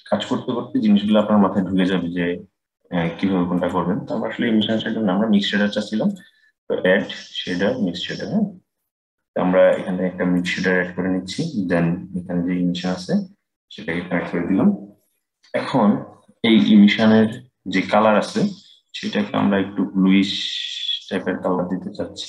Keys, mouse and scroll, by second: 4.3 Delete, 5.8-8.9 drag, 11.9 click, 16.9 click.